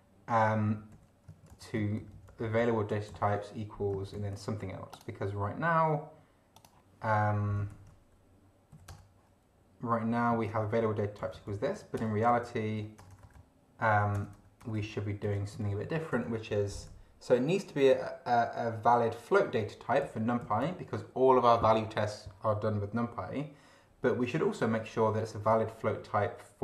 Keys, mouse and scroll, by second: 0.7 Down, 0.9 End, 1.5 ctrl+Left, 3.1 ctrl+shift+c, 4.1 ctrl+c, 4.9 click, 6.5 click, 7.7 ctrl+v, 8.7 ,, 8.9 Return, 10.1 Up, 10.5 ctrl+Right, 11.2 ctrl+Left, 11.9 ctrl+Return, 12.3 ctrl+Down, 12.5 ctrl+End, 12.8 ctrl+Home, 13.0 ctrl+BackSpace, 14.8 Return, 15.2 Up, 15.5 ctrl+Right, 16.1 ctrl+Left, 20.0 Left.